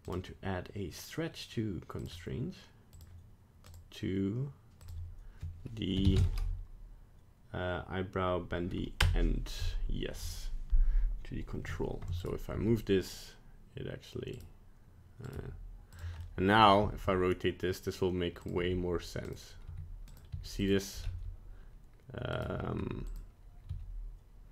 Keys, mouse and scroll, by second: 0.0 click, 2.9 click, 4.8 click, 12.2 right click, 12.5 g, 15.2 right click, 15.3 g, 16.2 middle click, 16.8 r, 18.5 g, 19.7 g, 20.3 r, 21.0 s, 22.8 g, 23.7 r.